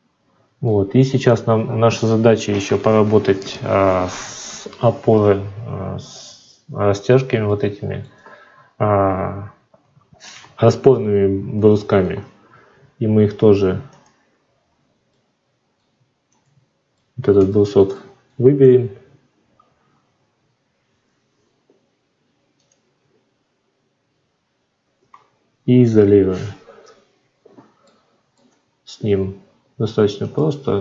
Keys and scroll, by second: 9.8 F9, 24.9 F9, 25.7 /.